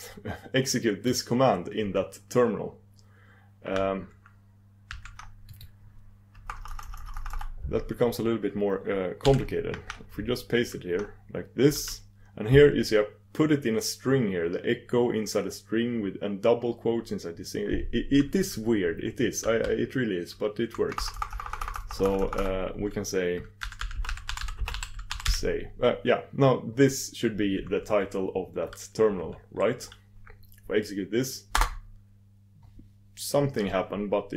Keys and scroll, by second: 32.9 ctrl+super+Return.